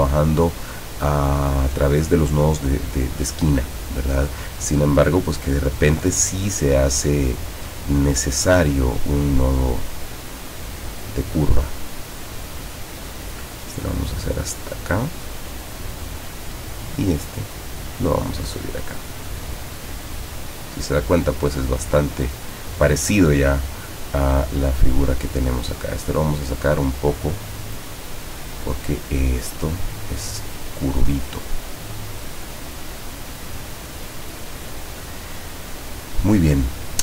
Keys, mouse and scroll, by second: 8.3-9.6 drag, 13.4-16.3 drag, 17.6 click, 26.4-28.6 drag, 29.3-34.2 drag.